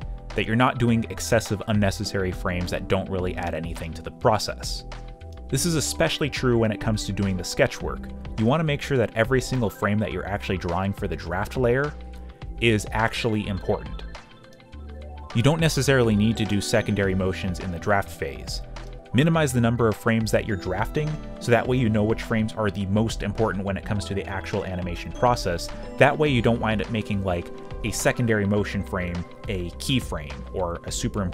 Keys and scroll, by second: 1.2 z, 3.0 alt+Delete, 6.9-8.4 typing, 9.8-11.0 typing, 11.6 ctrl+d, 12.3 g, 15.8 space, 15.8 q, 17.4-21.9 typing, 23.0 y, 23.2 space, 24.6 g, 26.4 z, 27.5 g, 28.0 y, 28.4 space, 29.6 space, 30.2 ctrl+shift+h, 30.7 q.